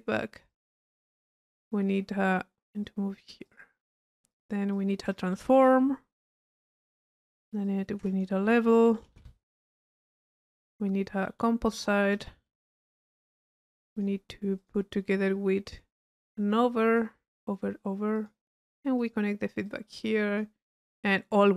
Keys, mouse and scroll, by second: 1.2 click, 2.4 right click, 2.9-3.8 drag, 4.3-5.4 drag, 6.6 click, 7.2 click, 7.7-8.2 drag, 8.6 click, 9.9 click, 10.5 click, 11.3 right click, 11.8 click, 11.8 right click, 13.9 click, 15.3-16.1 drag, 16.9 click, 18.2 click, 19.0 click, 19.7-20.4 drag, 21.0 click.